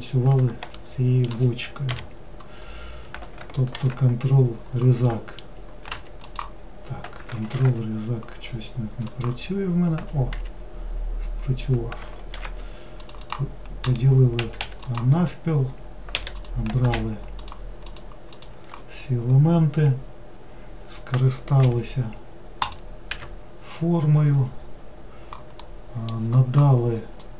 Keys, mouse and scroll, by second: 0.8-1.9 shift+middle drag, 1.9 KP_Decimal, 2.8 scroll down 1, 3.8 ctrl+r, 6.3 click, 7.6 ctrl+r, 12.4 ctrl+r, 14.5 right click, 14.6 Escape, 14.9 click, 16.2 3, 16.4 click, 16.9 click, 17.4 shift+click, 17.9 shift+click, 18.4 shift+click, 22.7 click, 23.1 n, 24.5-25.7 scroll down 1, 25.7-27.3 middle drag.